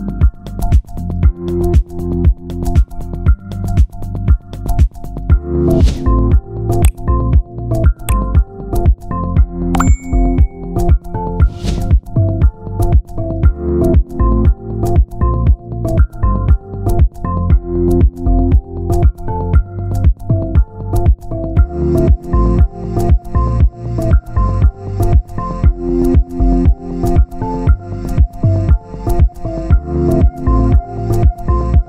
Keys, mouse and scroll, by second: 4.7 Tab, 5.1 a, 8.8 click, 10.4 shift+d, 12.8 s, 15.0 click, 17.5 alt+a, 17.8-18.2 scroll up 2, 18.2 shift+middle click, 19.3 click, 20.8 click, 21.3 alt+a, 21.5 ctrl+z, 23.9 right click, 24.8 alt+a, 25.6 click, 28.7 alt+a, 29.6 click, 31.6 alt+a.